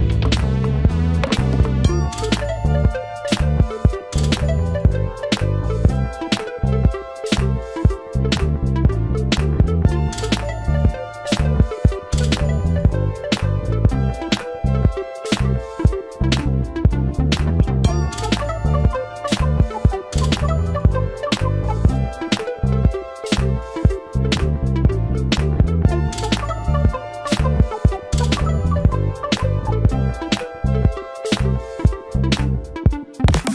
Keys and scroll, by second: 4.7 space, 19.2 space, 19.3 Escape.